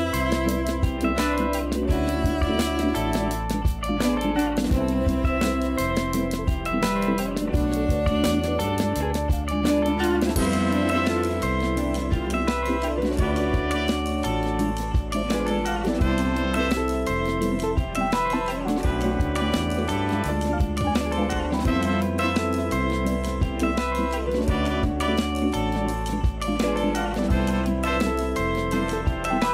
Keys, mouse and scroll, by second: 0.1 click, 0.8-3.7 middle drag, 3.7-4.1 scroll up 1, 4.1-7.7 shift+middle drag, 7.7-8.1 scroll down 1, 8.1-9.9 middle drag, 9.9 click, 10.6-11.1 shift+middle drag, 11.1-11.4 scroll up 2, 11.4-11.9 middle drag, 11.9 Tab, 12.3 3, 12.5 click, 13.1 g, 14.6 ctrl+KP_Add, 15.2 KP_1, 15.7-16.1 scroll up 2, 16.1 shift+middle click, 16.4 scroll up 2, 16.9 g, 18.5-19.5 scroll down 5, 19.5 Tab, 20.1 shift+middle click, 20.8 click, 21.0-21.9 scroll up 2, 21.9 Tab, 22.1-23.8 middle drag, 23.8 click, 24.3 ctrl+KP_Add, 24.7 KP_1, 25.2-25.6 scroll up 2, 25.6 g, 28.6-29.4 scroll down 9, 29.4 a.